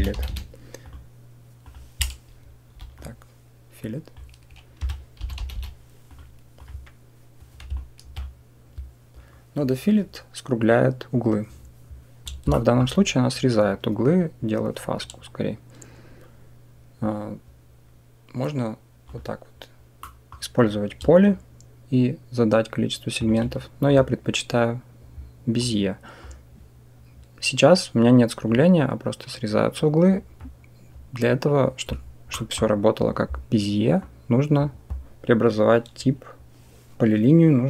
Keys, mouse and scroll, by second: 0.1 l, 2.6 Delete, 2.8-3.2 drag, 3.6-6.5 drag, 5.4 l, 7.6 alt+click, 12.4 shift+drag, 18.9 click, 19.9 middle click, 21.2-23.1 shift+drag, 23.7-24.1 drag, 25.4 click, 32.3 middle click, 33.9-37.6 drag.